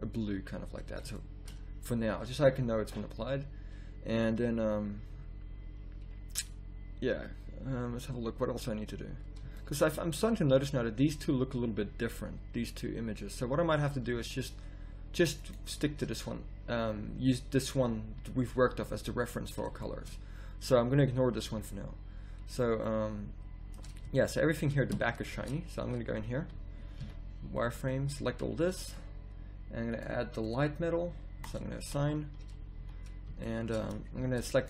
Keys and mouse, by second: 4.0 z, 9.5 middle click, 11.2 middle click, 13.3 z, 14.1 z, 16.2 z, 19.0 z, 24.0 z, 25.3 Tab, 27.0 z, 27.7 b, 30.1-31.7 drag, 31.8 z, 32.0 a, 32.4 z, 32.7 z, 34.2 Tab.